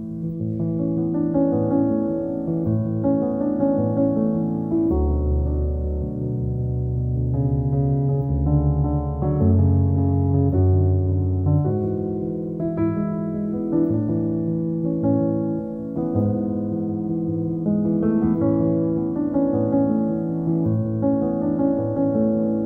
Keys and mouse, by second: 0.0 middle click, 0.2 shift+click, 0.3 alt+middle click, 0.5 middle click, 0.8 shift+click, 1.1 alt+middle click, 1.8 KP_1, 2.1 g, 3.2 middle click, 3.5 middle click, 3.9 KP_1, 4.3 g, 5.7 alt+middle click, 6.2 click, 6.4 g, 7.9 g, 8.4 g, 9.0 2, 9.4 click, 9.6 middle click, 9.8 click, 10.5 click, 10.7 alt+middle click, 10.8 click, 11.9 alt+middle click, 12.5 click, 12.6 g, 13.3 click, 13.6 middle click, 13.8 alt+middle click, 14.4 g, 15.2 alt+middle click, 15.9 click, 16.1-17.8 middle drag, 17.8 Tab, 18.0 alt+middle click, 19.0 middle click, 19.6 Tab, 19.7 middle click, 19.9 click, 20.4 3, 20.5 click, 20.7 alt+middle click, 21.2 i.